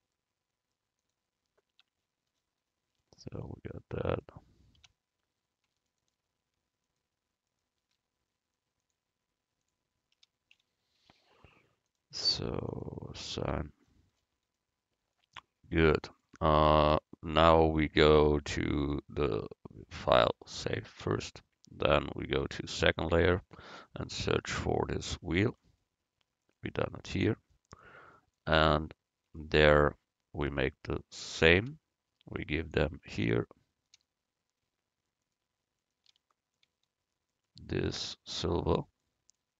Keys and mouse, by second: 1.1 click, 1.8 Tab, 2.4 click, 4.9 Tab, 8.9-11.6 drag, 12.8-14.6 drag, 13.5 Tab, 20.1-22.0 drag, 22.5-24.9 drag, 26.6-27.6 right drag, 27.3 Tab, 39.1 click.